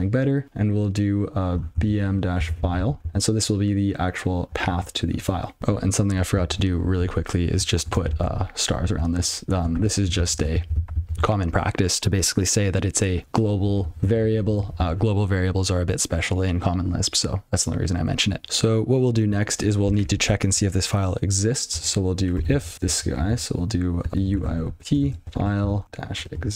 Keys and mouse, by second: 1.7-3.2 typing, 5.1 double click, 6.4 ctrl+n, 7.5 ctrl+f, 8.4 alt+f, 9.1 8, 9.7 *, 10.3 ctrl+s, 11.6 ctrl+n, 14.0 ctrl+p, 15.3 ctrl+b, 18.4 Tab, 21.7 (, 22.5 f, 22.6 space, 22.7 ctrl+n, 24.0-26.5 typing.